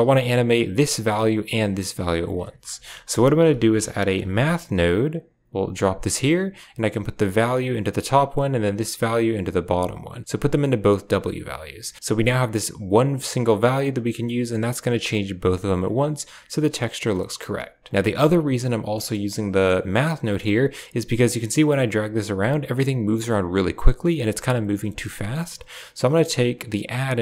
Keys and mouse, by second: 0.4 click, 1.5 click, 2.5 shift+a, 7.0-7.9 drag, 8.7-10.9 drag, 11.4 click, 12.0-15.7 drag, 17.0 middle click, 17.9 click, 20.1 middle click, 21.1-24.5 drag, 25.9-27.2 drag.